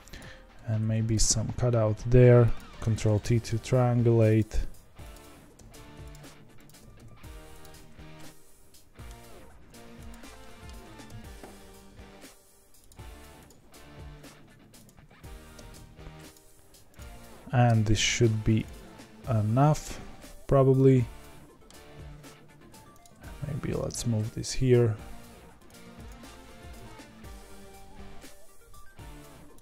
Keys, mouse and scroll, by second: 0.1 click, 0.8 ctrl+b, 2.8 ctrl+t, 3.1 middle click, 3.6-4.3 scroll up 5, 4.3 click, 5.1 click, 5.6 g, 6.6 click, 6.8 g, 7.8-8.1 scroll down 3, 8.1 middle click, 9.1-9.7 scroll down 2, 9.7 2, 10.0 click, 10.4 middle click, 10.8 ctrl+b, 13.4 click, 14.4 1, 14.8 click, 15.6 g, 16.9 click, 17.7 g, 20.7-23.0 middle drag, 23.0 click, 23.7 g, 25.8 2, 26.0 click, 26.7 ctrl+b.